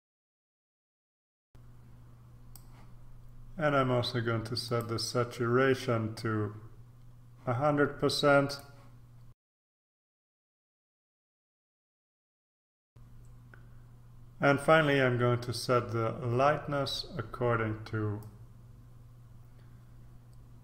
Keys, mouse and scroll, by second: 0.0 click, 0.2 click, 0.4 click, 0.6 click, 0.9 click, 1.1 click, 1.3 click, 1.4-3.1 drag, 4.6 click, 8.4 click, 9.3 click, 9.4 click, 9.6 click, 9.7 click, 9.9 click, 10.2 click, 10.4 click, 11.4 click, 11.5 click, 11.7 click, 12.0 click, 12.1 click, 12.5 click, 18.2-20.6 drag.